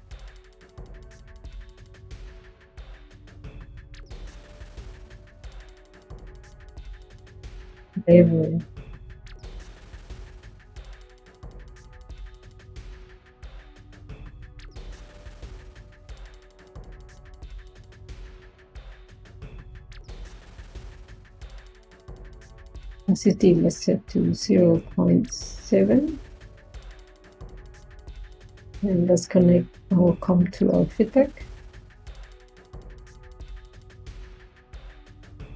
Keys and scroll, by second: 8.0-9.7 typing, 12.7-13.5 typing, 24.0-25.2 typing, 28.1-28.9 typing.